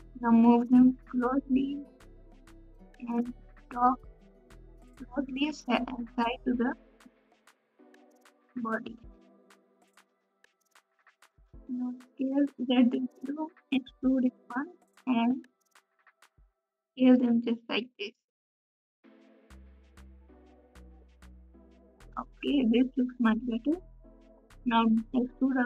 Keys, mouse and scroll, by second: 17.6-25.6 drag.